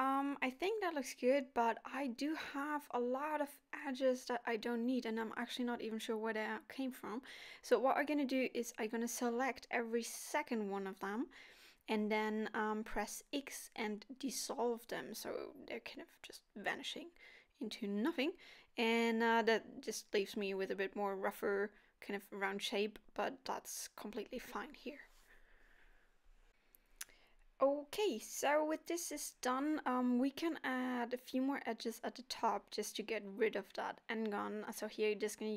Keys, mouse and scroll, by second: 0.7 click, 2.2 alt+click, 3.2 click, 3.9 middle click, 5.3 alt+shift+click, 6.7 middle click, 7.1 alt+shift+click, 7.7 middle click, 8.0 alt+shift+click, 8.9 middle click, 9.3 alt+shift+click, 15.4 middle click, 17.3-17.7 scroll up 2, 17.8 shift+middle click, 18.2 scroll up 2, 19.2-20.3 scroll up 1, 19.2 k, 22.9 k, 27.8 k, 30.3 k, 33.1 k, 34.7 right click, 35.2-35.5 scroll down 9.